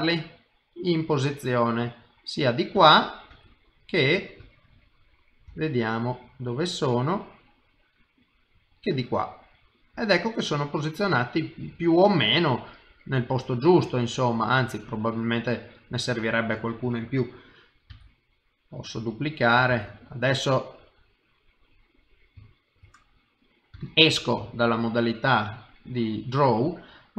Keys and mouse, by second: 0.4 middle click, 2.8 KP_1, 3.3 KP_3, 5.5 g, 8.9 middle click, 17.9 shift+d, 19.7 shift+d, 21.1 middle click, 22.5 shift+middle click, 22.9 middle click, 23.7 Tab, 24.1 middle click.